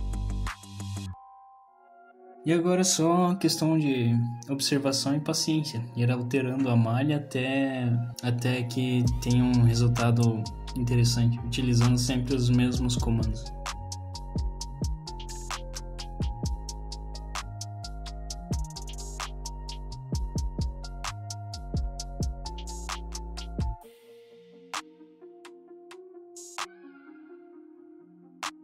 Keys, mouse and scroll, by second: 0.4-0.7 scroll down 1, 0.7 middle click, 1.7 click, 2.4 click, 2.7 middle click, 2.8 scroll down 1, 2.9 middle click, 3.2 scroll up 2, 3.4 scroll down 2, 3.6 shift+middle click, 3.8 scroll up 2, 4.2 middle click, 4.7 shift+middle click, 4.8-5.4 scroll down 4, 4.9 middle click, 5.4 middle click, 5.7 scroll up 2, 5.9 middle click, 6.4 ctrl+r, 7.0 middle click, 7.4 s, 9.4 middle click, 9.6-10.1 scroll up 3, 10.1 alt+click, 11.3 middle click, 11.6 middle click, 11.9 click, 12.0 click, 12.3 click, 12.4 click, 12.7 middle click, 12.9 middle click, 13.1 click, 13.3 middle click, 13.6 click, 13.8 click, 14.4 click, 14.5 middle click, 15.0 middle click, 15.4 click, 15.5 scroll up 1, 15.7 middle click, 15.9 click, 16.3 click, 16.8 middle click, 17.4 click, 17.4 middle click, 17.7 scroll down 1, 17.9 middle click, 18.2 alt+click, 18.4 click, 19.1 middle click, 19.4 click, 19.6 shift+click, 19.8 click, 20.2 middle click, 20.5 middle click, 20.7 click, 21.2 click, 21.4 click, 21.8 scroll down 1, 22.0 middle click, 22.3 middle click.